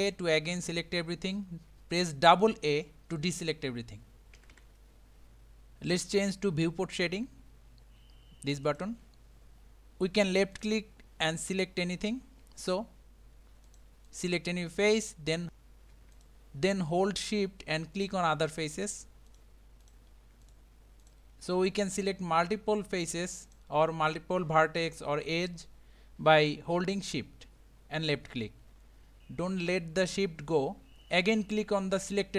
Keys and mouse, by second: 4.4 a, 4.6 a, 8.7 click, 10.6 click, 13.7 click, 14.1 click, 14.8 click, 16.2 shift+click, 18.8 shift+click, 19.3 shift+click, 19.8 shift+click, 20.4 shift+click, 21.0 shift+click, 23.0 shift+click, 23.5 shift+click.